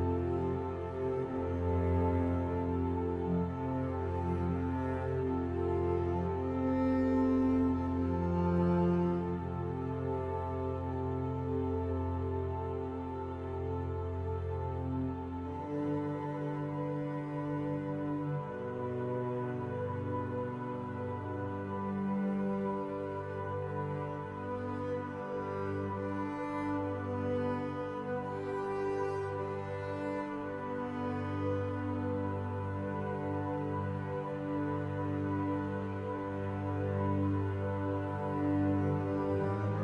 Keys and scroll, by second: 22.4 ctrl+z.